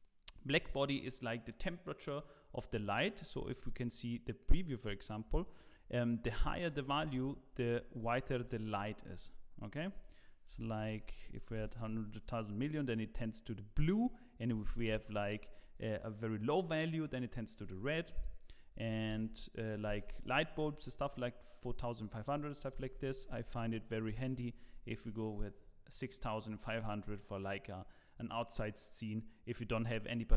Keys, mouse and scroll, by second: 3.6 click, 7.2 click, 7.2 KP_0, 9.7 click, 10.7 KP_0, 12.6 click, 12.6 KP_0, 17.1 click, 19.3 KP_0, 21.9 click, 23.3 KP_0.